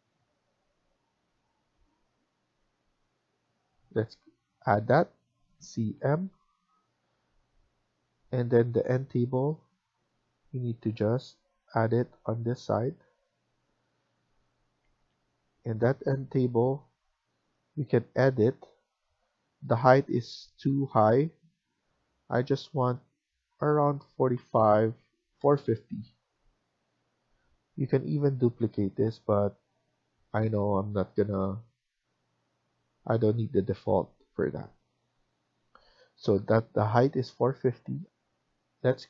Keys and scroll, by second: 8.4 Escape, 8.4 typing, 8.6 Escape, 10.7 Right, 11.0 Right, 12.8 Right, 14.7 Escape, 15.0 Escape, 33.0 Escape, 33.2 Escape.